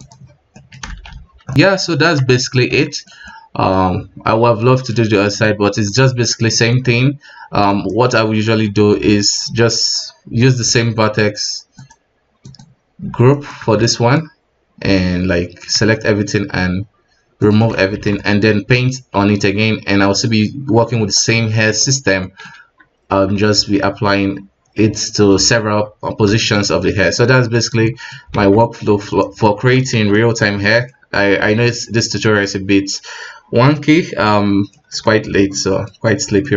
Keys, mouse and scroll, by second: 1.2 scroll down 1, 1.5-2.1 middle drag, 2.1 z, 2.5-2.8 scroll up 3, 2.9-5.4 shift+middle drag, 5.4 KP_1, 5.8-10.2 middle drag, 10.2 Tab, 10.6 Tab, 11.9 click, 12.5 click, 13.3-13.6 right drag, 13.6 Tab, 13.9-15.7 middle drag, 15.7 a, 17.5 click, 18.0 alt+a, 18.2 middle click, 18.6 Tab, 22.1 scroll up 10, 22.3 middle click, 22.5 KP_1, 26.5 x, 26.8-27.5 middle drag, 27.5 right click, 27.8 middle click, 28.1 scroll up 1, 28.4 alt+a, 28.6-29.1 middle drag, 29.1 right click, 29.5-30.0 shift+middle drag, 30.0 alt+a, 30.2-31.2 middle drag, 31.2-31.5 scroll down 3, 31.5 middle click, 31.8-32.2 scroll up 2, 32.2-33.9 middle drag, 33.9 scroll down 1, 34.2-36.0 middle drag, 36.0-36.5 scroll up 4, 36.4-36.5 middle drag.